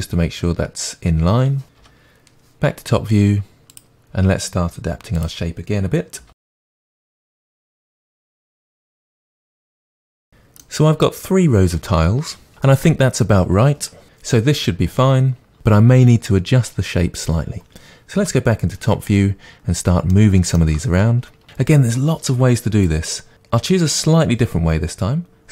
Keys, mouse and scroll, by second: 1.8 KP_7, 3.7-4.8 drag, 5.2 click, 6.2 g, 6.6 g, 7.0 click, 7.7 click, 7.9 Delete, 8.2 click, 8.2 g, 8.6 g, 8.8 click, 9.0 shift+d, 9.2 click, 9.3 r, 9.4 click, 9.6-10.2 scroll down 2, 10.0-21.8 shift+middle drag, 18.2 KP_7, 19.1-19.5 scroll up 1, 21.8 click, 25.4-25.5 middle drag.